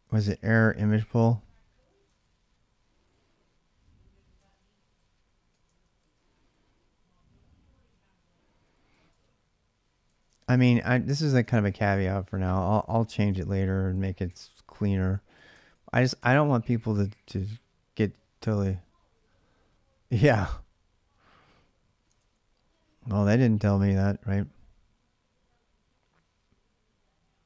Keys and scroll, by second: 0.1 ctrl+a, 0.3 ctrl+a, 1.6-3.3 typing, 4.2 ctrl+[, 4.4-11.9 typing, 12.9 ctrl+[, 13.1-14.1 typing, 13.3 Return, 14.1 ctrl+a, 15.1 ctrl+c, 15.4 ctrl+[, 15.5 k, 16.0 Return, 21.8 alt+Tab.